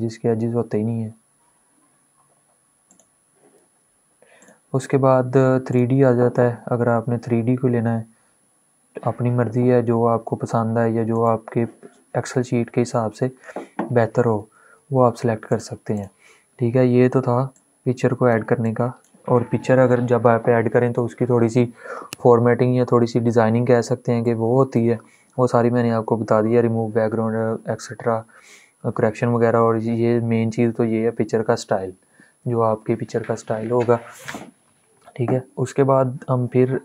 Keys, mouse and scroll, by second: 2.6 click, 10.8 click, 14.2 ctrl+Num_Lock, 14.5 ctrl+z, 15.2-23.9 drag, 23.9-36.5 drag, 36.6 click.